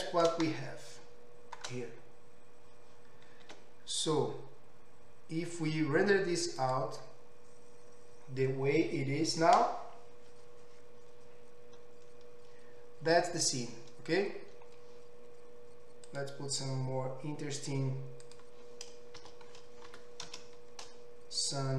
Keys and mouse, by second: 3.5 z, 16.1 click, 18.3-21.7 drag.